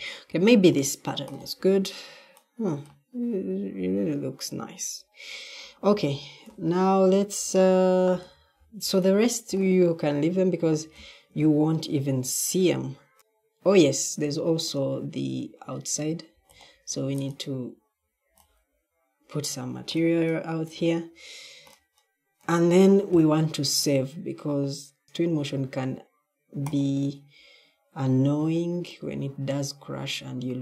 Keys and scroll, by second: 5.8 d, 7.4 s, 8.0 s, 8.5 s, 10.7 d, 11.2 d, 13.2 s, 25.0 Escape.